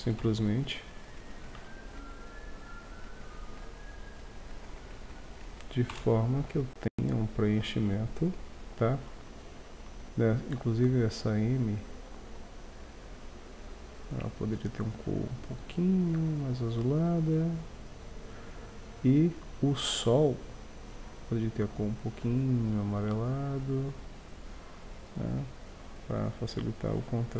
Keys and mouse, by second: 0.2 KP_5, 1.6 shift+a, 5.9 KP_0, 6.6 shift+z, 10.8-13.7 middle drag, 15.8 middle click, 20.5-23.5 drag.